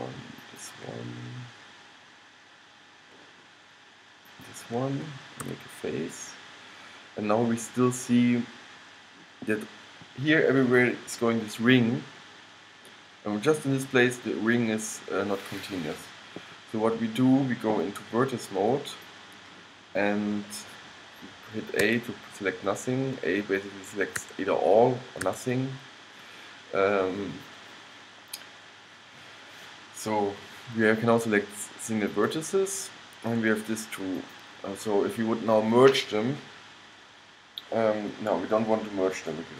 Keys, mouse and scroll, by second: 1.4-3.3 middle drag, 4.4-5.7 right drag, 5.7 f, 6.5 middle click, 7.0-8.6 middle drag, 9.4-18.7 middle drag, 19.0-20.8 drag, 22.0 a, 24.3 a, 25.4 a, 32.3-34.1 middle drag, 34.3 middle click.